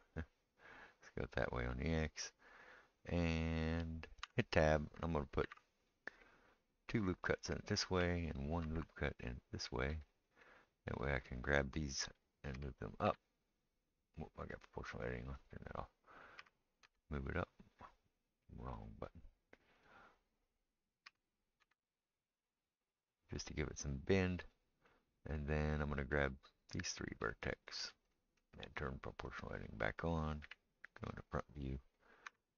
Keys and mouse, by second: 4.2 Tab, 5.4 ctrl+r, 8.6 ctrl+r, 12.5 g, 15.4 click, 15.5-18.7 middle drag, 16.4 g, 18.7 click, 18.8-19.8 middle drag, 19.8 click, 19.8-27.2 middle drag, 21.1 g, 26.7-29.4 drag, 29.4-32.5 middle drag, 30.4 KP_1, 32.3 r.